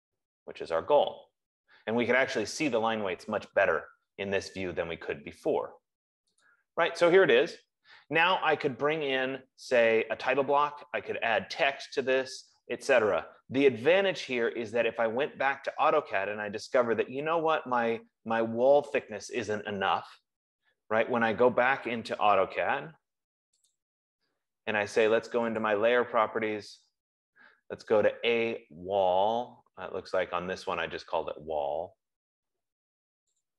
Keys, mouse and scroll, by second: 6.8 click, 24.6 click, 26.0 click, 27.3 F15, 30.6 middle click, 30.8 middle click, 32.5 middle click.